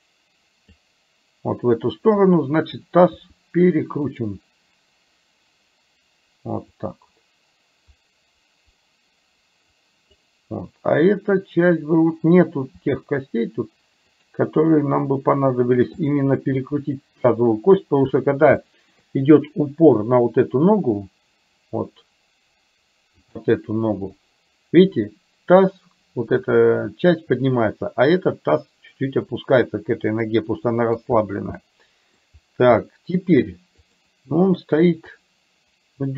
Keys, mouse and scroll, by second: 3.3 r, 6.8-10.3 drag, 12.9 r, 16.5 r, 18.7 shift+middle click, 30.3 middle click, 31.7 middle click, 32.9 shift+middle click, 33.9 click, 35.2 click, 35.4-36.1 drag.